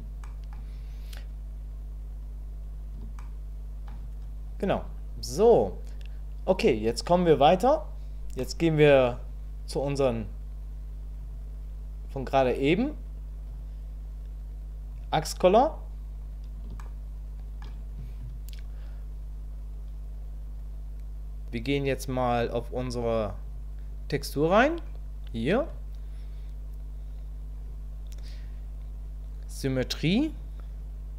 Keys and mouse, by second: 0.2 shift+middle click, 3.2 shift+middle click, 8.4 middle click, 11.2 click, 16.8 shift+middle click, 30.3 click.